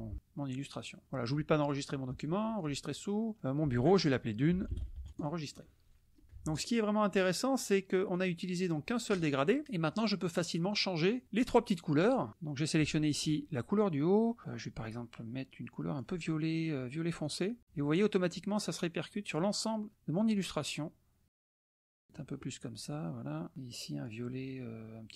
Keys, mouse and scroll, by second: 0.1 ctrl+shift+click, 1.6 click, 2.6 click, 4.3-5.5 typing, 5.1 click, 6.1 click, 7.1 drag, 8.1 click, 11.2 click, 12.3 click, 14.4-16.4 drag, 17.4 click, 19.4 click, 19.9 click, 21.5 click, 23.5 click.